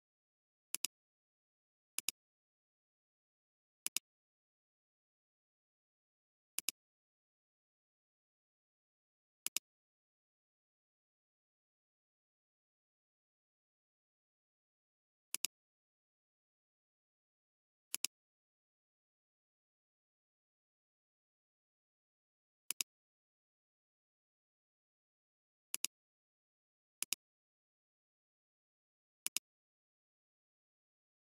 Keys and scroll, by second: 5.2 ctrl+t, 26.2 space.